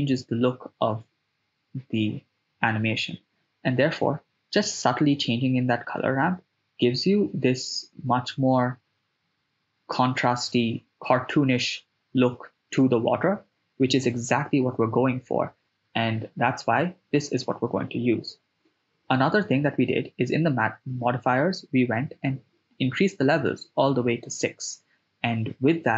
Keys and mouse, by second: 3.3 click, 5.0-6.8 drag, 7.4 shift+space, 16.1 shift+space, 19.7 click, 22.7 shift+space, 25.7 shift+space.